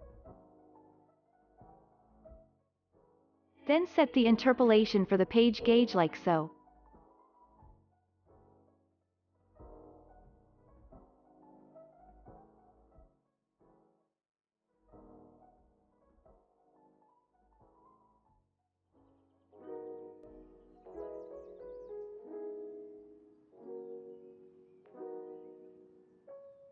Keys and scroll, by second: 0.4 space, 1.0 ctrl+s, 6.5 F9, 16.4 ctrl+z, 18.8 ctrl+z.